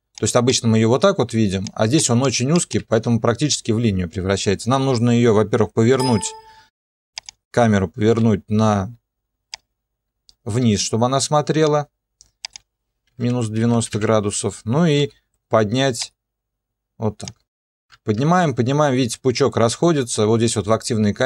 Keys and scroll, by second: 2.8 ctrl+2, 5.9 r, 8.1 r, 12.9-15.0 typing.